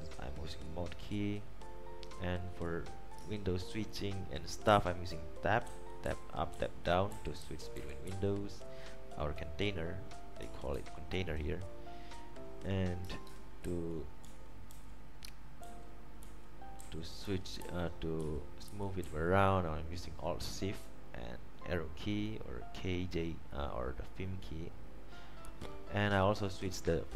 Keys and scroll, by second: 4.8 alt+Up, 5.8 alt+Down, 6.2 alt+Up, 6.7 alt+Down, 7.6 alt+Up, 8.2 alt+Down, 10.9 alt+Up, 10.9 alt+Down, 13.8 super+t, 14.4 alt+shift+Left, 14.9 alt+shift+Right, 15.8 alt+shift+Right, 16.9 alt+shift+Left, 17.4 alt+shift+Up, 18.4 alt+shift+Left, 18.8 alt+shift+Down, 19.3 alt+shift+Left.